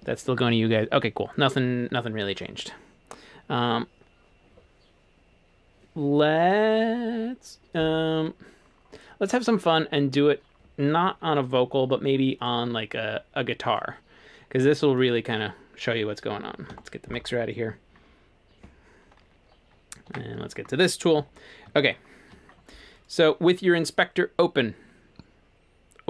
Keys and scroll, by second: 16.7 F3, 20.1 1, 21.2 e.